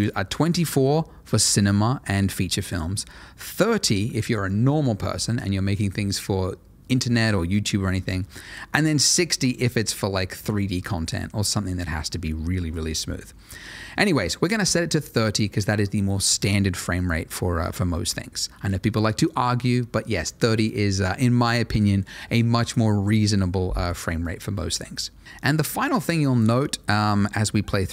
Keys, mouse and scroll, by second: 8.5 click, 12.7 click.